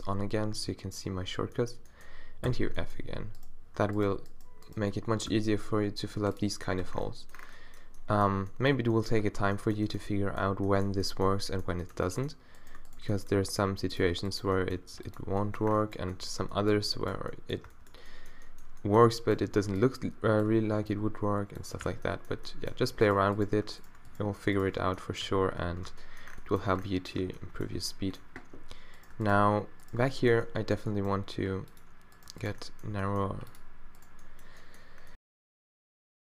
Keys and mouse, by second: 0.6 n, 1.4-2.5 middle drag, 2.5 f, 2.7 middle click, 5.3 d, 6.8 Tab, 9.2 Tab, 13.4 g, 14.0 middle click, 14.8 g, 16.4 Tab, 17.7 Tab, 19.5 a, 19.7 b, 20.9 b, 21.8 q, 24.7 q, 25.3 q, 25.9 Tab, 27.2 Tab, 30.8 g, 32.9 g, 33.5-36.1 drag.